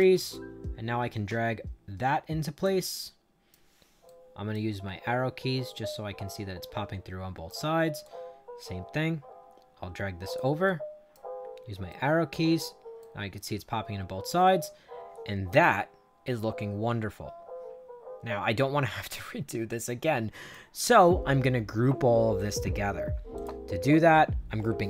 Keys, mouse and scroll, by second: 0.2-2.5 drag, 2.7 right click, 4.0 right click, 4.7 Up, 5.1 Up, 5.6-7.4 right drag, 7.9-10.3 drag, 10.6 right click, 11.3 Up, 11.8 right click, 12.3 Up, 12.9-20.4 right drag, 23.3 click.